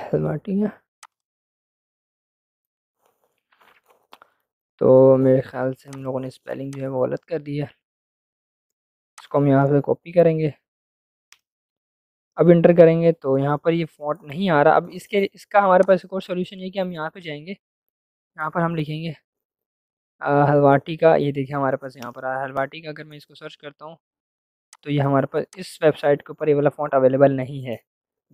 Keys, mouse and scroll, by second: 0.9 click, 5.8-8.5 drag, 8.5 ctrl+c, 9.1 click, 9.4 ctrl+v, 10.1-11.0 typing, 11.1 Return, 15.9 click, 18.0 ctrl+v, 19.9 Down, 21.8 Return, 24.6 click.